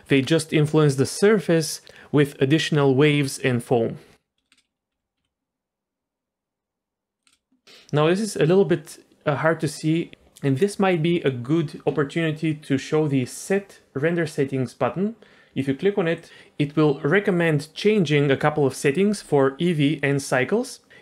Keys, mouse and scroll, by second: 4.5 space, 4.9 f, 5.3 g, 7.3 space, 15.5-21.0 drag.